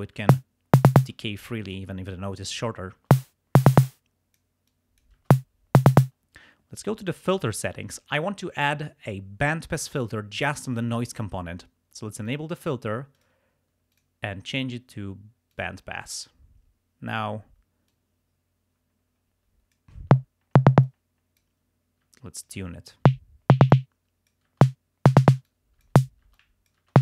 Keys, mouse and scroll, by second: 0.3 space, 1.0 space, 1.2 click, 3.1 space, 3.8 space, 3.9 click, 4.7 click, 5.3 space, 6.0 space, 7.2 click, 12.3 click, 13.2 click, 13.9 click, 15.6 click, 16.2 click, 17.9-20.0 drag, 20.1 space, 20.9 click, 22.1-25.3 typing, 22.5 click, 23.7 click, 25.5 click, 26.4 click.